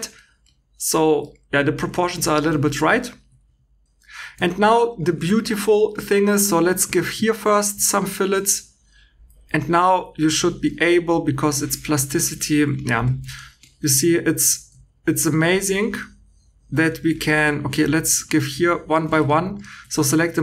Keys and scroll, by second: 3.8 2, 4.0 Escape, 4.4 shift+e, 6.3 2, 10.9 2, 13.0 Escape, 16.8 Escape, 17.7 2, 19.0 Escape.